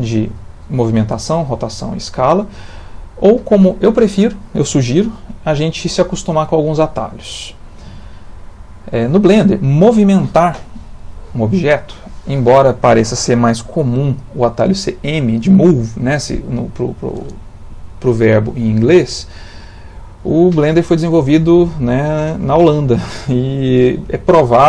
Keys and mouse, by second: 1.3 click, 1.7 click, 3.4 click, 7.2 middle click, 8.7 middle click.